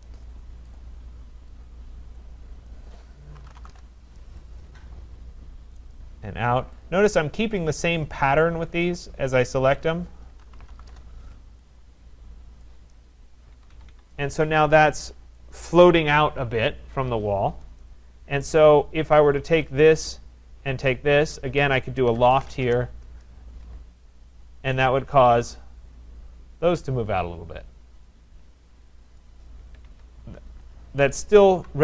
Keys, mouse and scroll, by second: 0.0-1.3 typing, 0.2 click, 0.8 click, 2.7 click, 3.1-4.1 typing, 4.5 click, 6.0 click, 6.8 click, 7.7-8.4 typing, 7.9 click, 9.8 click, 10.2-11.3 typing, 11.7 click, 12.8 click, 13.5 Escape, 13.7 Escape, 14.1 Escape, 15.1 typing, 15.3 right click, 17.2-17.8 scroll, 18.5 right click, 19.8 click, 21.2 shift+click, 21.9-23.0 typing, 24.4 click, 29.2 right click, 29.6 Escape, 29.9 Escape, 30.8 click, 31.6 Delete.